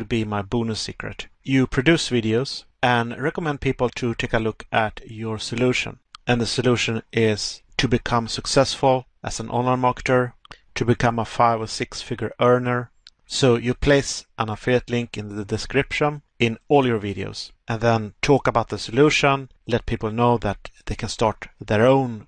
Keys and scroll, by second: 2.7 Pause, 12.6 Pause, 15.4 Pause, 16.8 Pause.